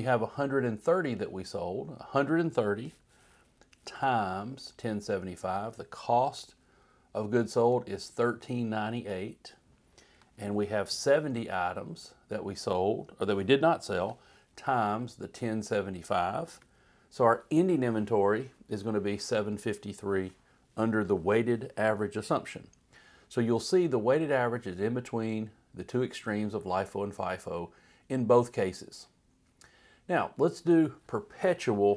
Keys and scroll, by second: 3.9 *, 6.3 Return, 7.6 Up, 9.1 Left, 11.1 =, 14.0 *, 16.5 Return.